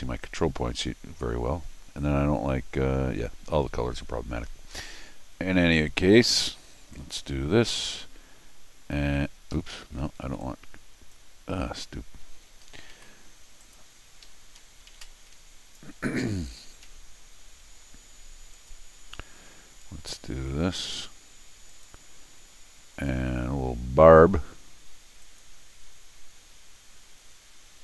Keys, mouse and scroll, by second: 6.9 click, 9.5 Escape, 9.7 Escape, 10.2 r, 10.4 click, 12.9 ctrl+z, 13.6 click, 14.2 Escape, 15.0 t, 15.0 click, 16.2 Escape, 16.8 l, 18.5 click, 21.7 click, 25.2 click.